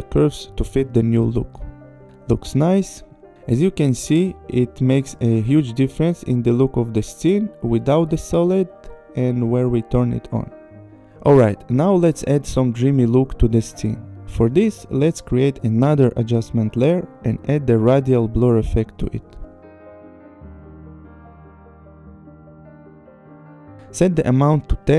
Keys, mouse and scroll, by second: 0.1 click, 0.6 click, 1.2 click, 1.7 click, 6.4 click, 7.7 click, 9.1 click, 10.8 click, 13.2 right click, 14.7 click, 15.9 click, 16.7-18.1 typing, 21.2 a, 21.3 l, 22.1 click, 22.3 click.